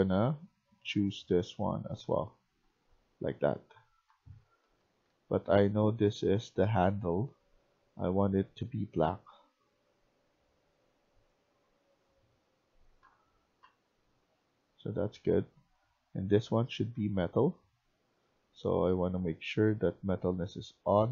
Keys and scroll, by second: 1.8-5.6 typing, 12.5-15.0 typing.